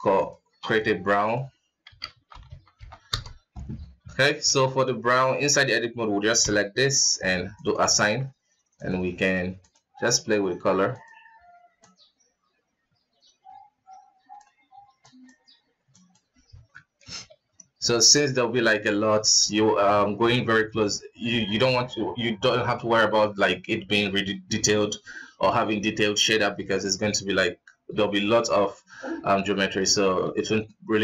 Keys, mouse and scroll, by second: 0.4-3.8 drag, 3.8 Tab, 4.0 scroll up 4, 4.2 alt+a, 5.3 alt+KP_3, 6.1 l, 7.3 click, 7.7 Tab, 8.5 drag, 9.3 click, 10.7 click, 16.3 alt+a, 16.4 middle click, 16.9 ctrl+s, 25.9-29.0 middle drag, 29.0 scroll down 2, 29.3 middle click, 29.6 scroll up 3, 30.0 ctrl+s, 30.4-31.0 middle drag.